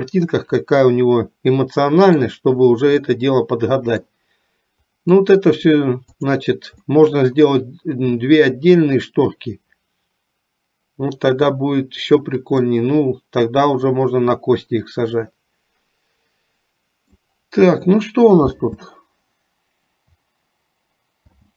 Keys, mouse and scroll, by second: 0.7-2.1 middle drag, 3.0-4.1 middle drag, 6.9 middle click, 12.6-17.2 middle drag.